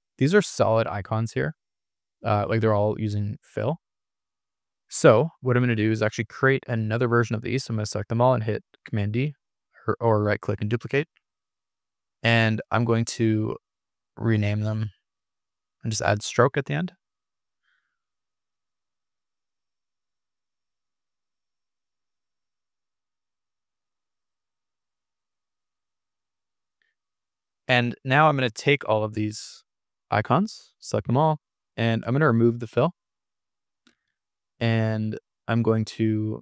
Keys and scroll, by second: 3.2 super+=, 9.8 super+d, 16.7-18.0 typing, 19.8 super+c, 22.3 super+v, 24.9 super+v, 26.9 super+v.